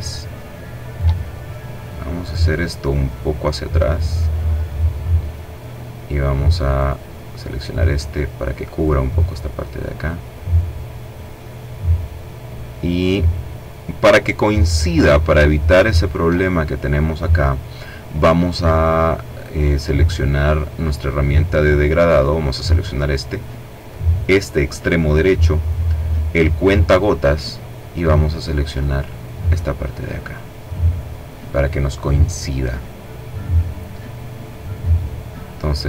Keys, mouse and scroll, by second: 5.8 click, 6.7-8.6 drag, 9.0-10.9 drag, 14.8-15.3 ctrl+scroll down 2, 20.1 click, 21.4 click, 23.0 click, 26.0 click, 28.3 click, 35.3 click.